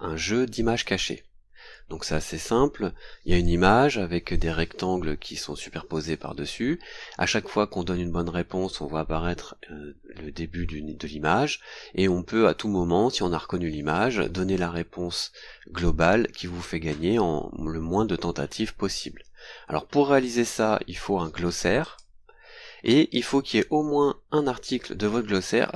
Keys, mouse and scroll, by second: 21.8 click, 23.1-23.6 scroll up 2.